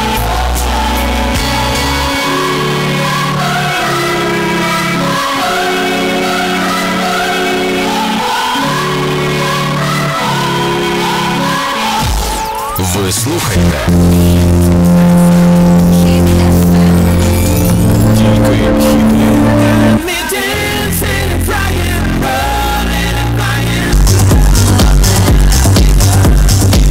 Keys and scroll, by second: 20.3 Page_Down.